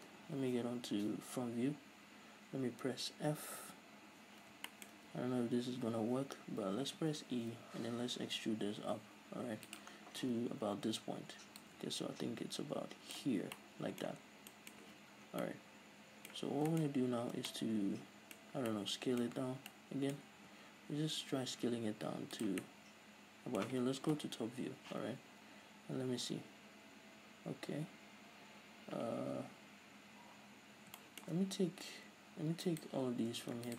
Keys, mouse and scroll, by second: 1.0 KP_1, 2.2-3.4 scroll up 2, 3.4-3.8 scroll up 1, 3.8 f, 4.8-11.7 shift+middle drag, 5.1-6.8 scroll up 2, 6.8-7.1 scroll down 2, 7.1 e, 10.0 scroll down 2, 10.3 z, 10.7-11.7 scroll up 2, 11.7-13.7 drag, 13.7-25.0 middle drag, 14.4-14.8 scroll down 2, 14.9 z, 15.2-15.5 scroll up 2, 16.6 scroll down 2, 19.5-19.8 scroll up 2, 20.5 s, 22.5 click, 24.3 KP_7, 25.0 z, 25.4-25.7 scroll up 1, 27.8-30.8 middle drag, 31.1-32.8 middle drag, 32.8-33.2 right drag.